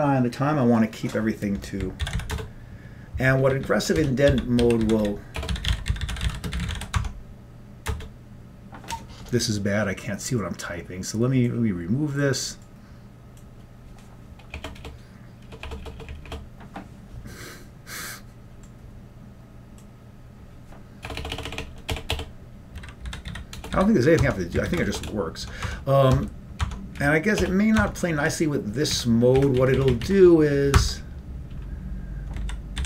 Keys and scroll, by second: 2.1 ctrl+x, 3.0 Return, 3.0 b, 4.2 Up, 4.2 Escape, 4.7-7.1 typing, 7.1 Tab, 8.3 Return, 14.6-16.3 typing, 21.2-24.0 typing, 24.3 Tab, 24.8 ctrl+g, 25.0 BackSpace, 25.6 Tab, 25.9 Tab, 26.4 Tab, 26.7 Tab, 27.1 Up, 27.5 BackSpace, 27.9 Tab, 28.3 Down, 29.0 Up, 29.5 Up, 29.8 Left, 30.0 Left, 30.1 Left, 30.9 Tab, 32.5 ctrl+k, 32.7-32.8 typing.